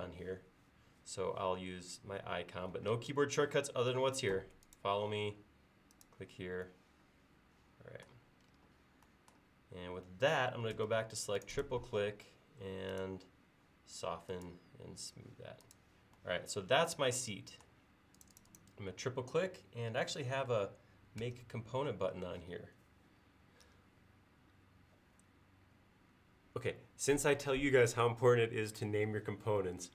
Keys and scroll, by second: 10.8 space, 21.3 g.